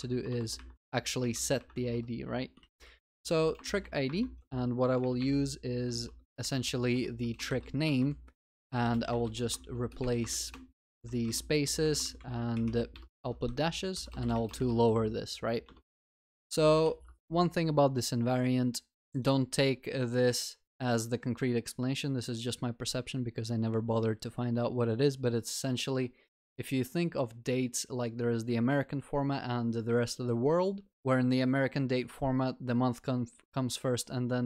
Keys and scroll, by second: 1.9 ctrl+y, 4.1 Return, 5.0 ctrl+BackSpace, 12.2 Return, 15.8 Return, 16.9 ctrl+s.